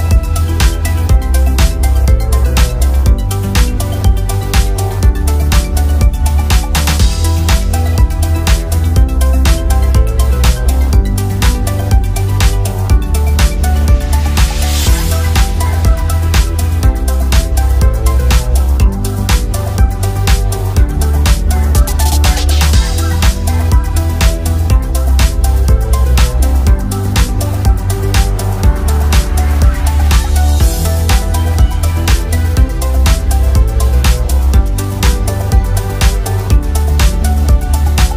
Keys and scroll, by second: 16.6 ctrl+d, 27.5 ctrl+d.